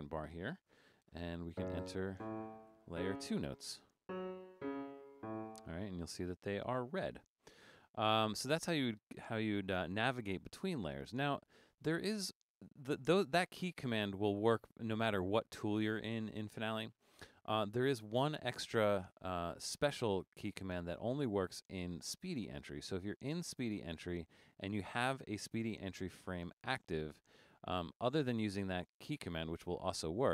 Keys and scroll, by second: 0.8 5, 2.7 4.